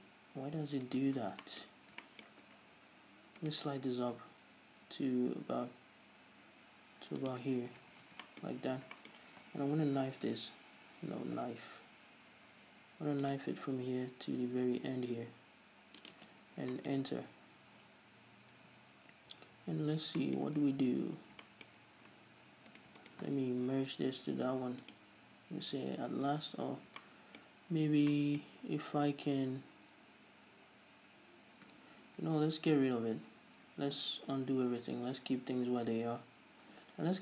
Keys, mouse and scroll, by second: 1.3 right click, 1.5 scroll down 2, 2.0 scroll up 2, 2.7-3.7 scroll down 2, 3.7 alt+right click, 4.3 g, 7.6 click, 7.9 ctrl+z, 8.5-23.0 shift+middle drag, 8.8 scroll up 1, 10.3 l, 11.6 k, 17.5 z, 19.6 a, 20.7-21.7 scroll up 2, 23.0 right click, 23.3 shift+right click, 23.9 alt+m, 26.7 ctrl+z, 27.3-37.2 shift+middle drag, 29.3 scroll up 2, 32.1 ctrl+z, 34.6 ctrl+scroll down 2, 35.5-37.2 scroll up 1.